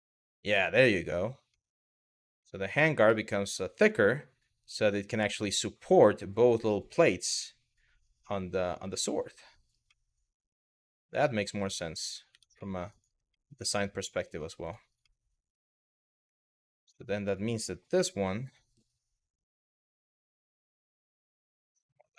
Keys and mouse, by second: 1.2 middle click, 2.0 middle click, 2.8-9.3 middle drag, 9.6-11.1 middle drag, 12.0 Tab, 12.3 middle click, 12.5 click, 13.0-13.9 middle drag, 14.8 middle click, 15.6 click, 16.0 middle click, 17.6 KP_3, 18.2 r, 19.2 click, 19.7 g, 21.8 click.